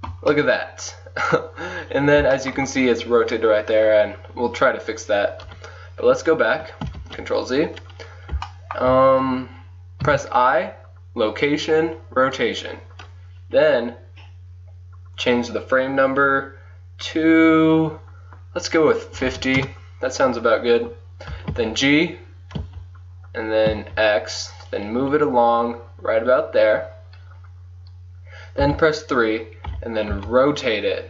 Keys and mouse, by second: 5.5 KP_1, 7.0 ctrl+z, 10.1 i, 15.2-17.0 drag, 17.0 middle click, 21.3 g, 28.7 KP_3, 30.2 r.